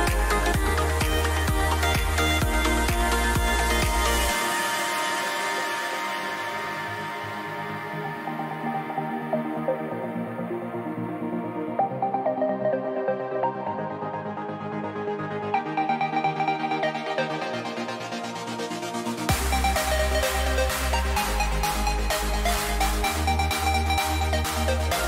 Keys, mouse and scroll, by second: 5.5-8.4 middle drag, 9.3-13.6 middle drag, 17.6-19.1 middle drag, 19.6 middle click, 21.0 a, 22.3-25.0 middle drag.